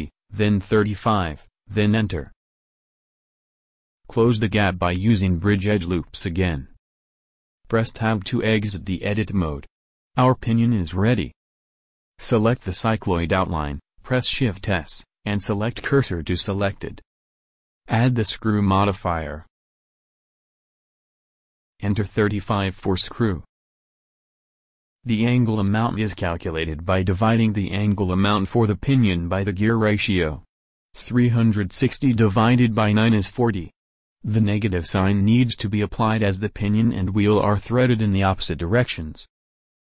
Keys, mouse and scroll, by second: 4.5 middle click, 5.1 right click, 5.5 w, 7.6 click, 8.5 Tab, 13.8 shift+s, 18.4-19.9 drag, 21.7-23.2 drag, 36.7-38.1 drag.